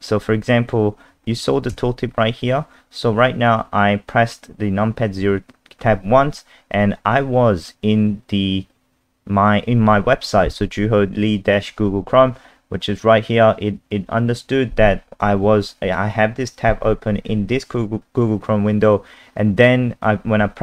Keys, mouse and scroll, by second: 1.7 KP_0.